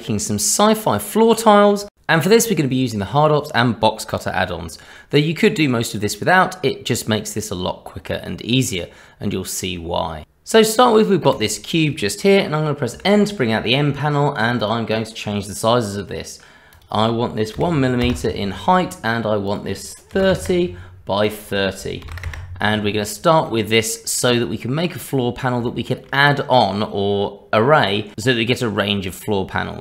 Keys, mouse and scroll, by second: 0.0 click, 0.5 click, 0.5 Tab, 0.6 click, 1.0 shift+click, 1.0 shift+click, 1.2 ctrl+shift+b, 1.8 middle click, 1.8 Tab, 1.9 click, 2.1 middle click, 2.2 scroll up 2, 2.3 shift+middle click, 2.4 ctrl+z, 2.5 q, 4.3 middle click, 4.9 click, 5.0 shift+middle click, 5.0 middle click, 5.7 shift+middle click, 5.8 shift+click, 6.0 ctrl+KP_Subtract, 6.6 click, 7.1 scroll down 1, 7.2 click, 7.5 alt+w, 7.5 click, 8.0 click, 8.6 scroll down 1, 8.7 scroll up 1, 8.8 middle click, 8.9 middle click, 8.9 click, 9.0 click, 9.0 shift+middle click, 9.2 alt+w, 9.2 q, 11.3 click, 12.9 n, 14.6 click, 16.7 click, 21.2 click, 22.8-23.1 scroll down 2, 23.5 middle click, 23.5-24.3 scroll down 2, 26.0 shift+middle click.